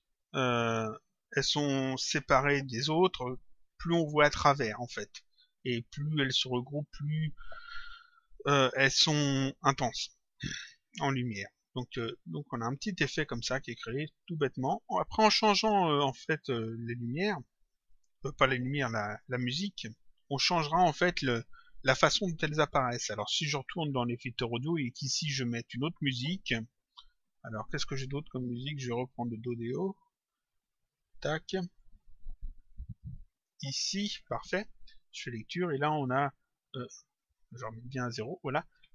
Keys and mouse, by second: 11.2 click, 14.5 click, 17.2 click, 24.4 click, 27.5 click, 29.7 click, 31.1 click, 35.2 click, 37.4 click.